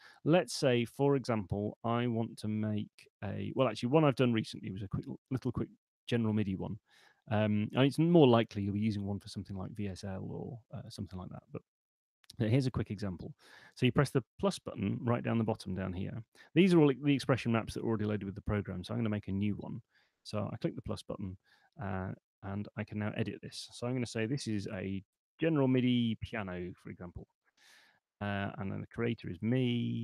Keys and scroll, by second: 24.2-26.5 typing, 27.2 Tab, 28.9-29.7 typing.